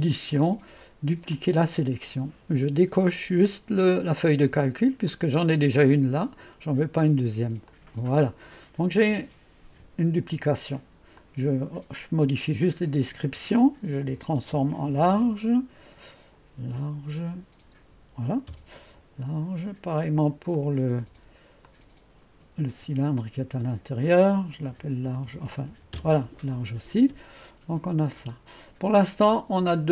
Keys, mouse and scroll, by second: 0.0 click, 1.4 click, 5.1 click, 7.7 click, 11.2 click, 12.7 F2, 14.1-16.7 typing, 18.3-19.0 typing, 20.6-22.9 drag, 22.9 F2, 24.5-25.8 typing, 26.0 Return, 29.1 click, 29.7-29.9 typing.